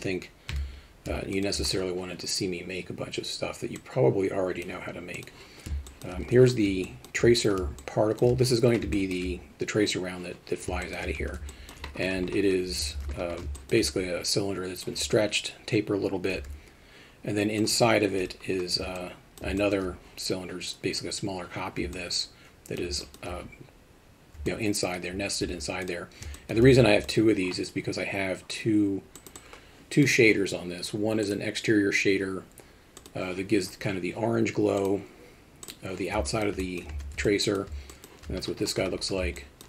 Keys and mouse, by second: 0.5 KP_3, 1.3 alt+shift+middle drag, 3.8-4.6 drag, 5.9 alt+shift+middle drag, 6.8 alt+shift+middle drag, 7.8-8.2 alt+shift+middle drag, 8.9 alt+shift+middle drag, 10.8 alt+shift+middle drag, 11.2 Tab, 11.5 alt+middle click, 13.0 alt+a, 13.6 alt+shift+middle click, 13.9 alt+middle click, 17.6 click, 19.1 alt+middle click, 19.7 alt+shift+middle click, 22.1 alt+middle click, 23.1 alt+shift+middle click, 24.5 middle click, 25.8 click, 26.4 alt+shift+middle click, 29.4 click, 31.3-33.1 drag, 34.8 click, 35.6 click, 36.3 alt+shift+middle click, 36.6 alt+middle click, 36.9 Tab, 37.2-37.6 alt+middle drag, 38.0 middle click, 39.5 middle click.